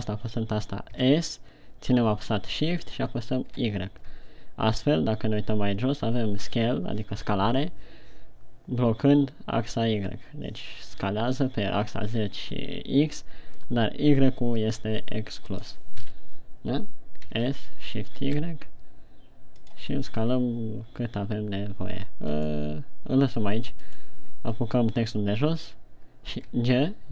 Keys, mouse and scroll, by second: 1.4 s, 15.9 click, 16.4 KP_1, 17.7 s, 20.2 click, 20.9 g, 22.9 right click, 24.4 right click, 26.8 g.